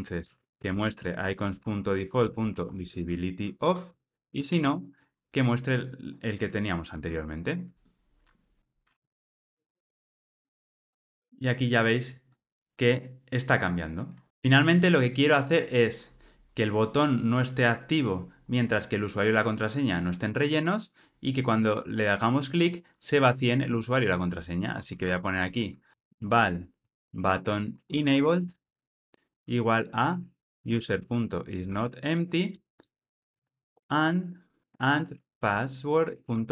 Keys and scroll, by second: 6.7 Return, 6.8 ctrl+r, 32.8 Return, 36.0 Return.